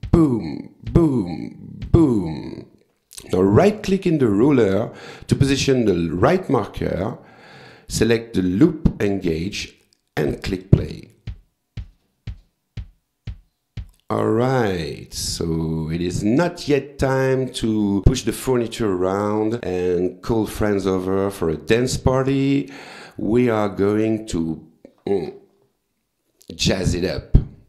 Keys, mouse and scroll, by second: 0.1 click, 0.9 click, 1.8 click, 4.0 right click, 8.0 click, 10.2 click, 14.0 click, 15.1 click.